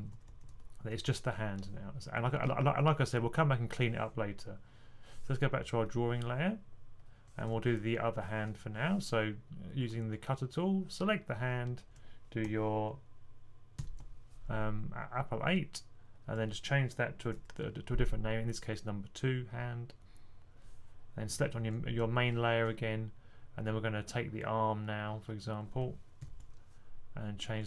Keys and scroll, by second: 13.6 super+8, 17.2 2, 26.1 super+8.